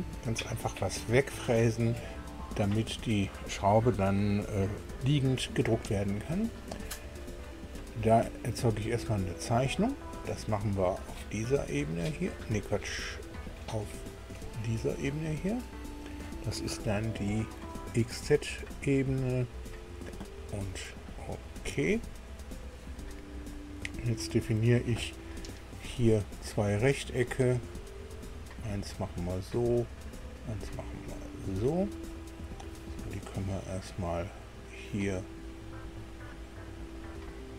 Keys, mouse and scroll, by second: 9.1 click, 9.8-10.2 scroll down 1, 15.1 scroll down 2, 16.9 shift+middle click, 19.1 click, 21.4 click, 22.9-23.5 scroll up 1, 26.5 click, 27.6 click, 28.9 click, 29.9 click, 31.6 click, 31.9 middle click, 34.3 click, 36.9 click.